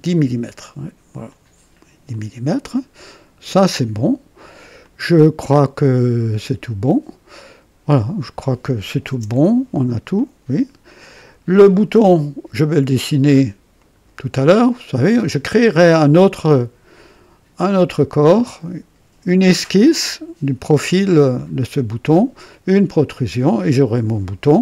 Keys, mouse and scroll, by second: 1.2 click, 2.1-4.6 drag, 4.8-6.5 drag, 6.8-8.5 drag, 9.1 KP_0, 10.1-11.6 drag, 13.7 click, 21.3 click.